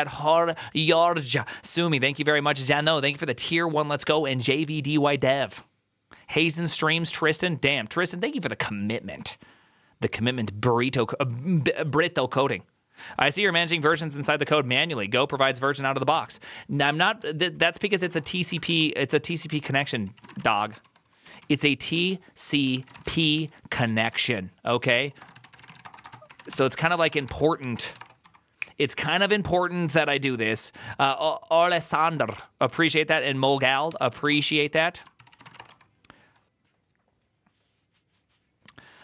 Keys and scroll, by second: 17.6-21.3 typing, 19.5 Return, 19.7 ctrl+c, 19.8 ctrl+c, 21.8 ctrl+u, 22.4-28.6 typing, 33.5 alt+{, 33.7 ctrl+c, 33.8-36.1 typing.